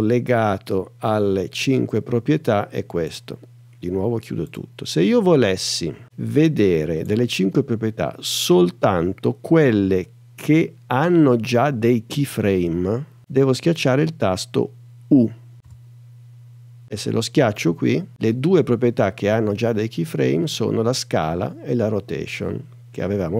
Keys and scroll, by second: 15.6 u.